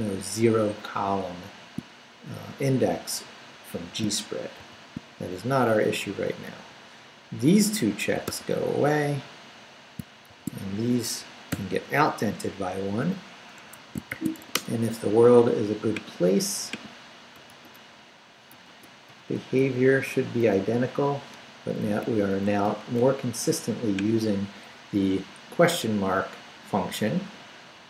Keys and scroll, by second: 4.6 shift+v, 6.4 Down, 8.2 d, 10.3 shift+v, 10.7 shift+Down, 11.5 shift+,, 13.6 Escape, 14.1 shift+;, 14.4 shift+w, 14.5 Return, 17.5 shift+/, 17.7 shift+Return, 18.6 shift+/, 19.1 shift+Return, 19.6 Right, 20.0 Up, 20.5 shift+/, 21.3 shift+Return, 21.8 Up, 22.4 shift+Up, 22.6 shift+/, 23.0 shift+Return, 23.8 Return.